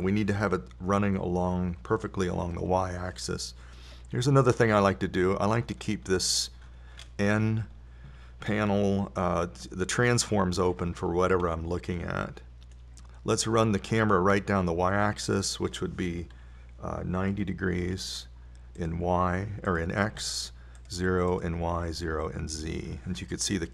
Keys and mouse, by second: 6.1 n, 12.2-15.7 middle drag, 16.7-19.2 drag, 21.1-23.4 drag.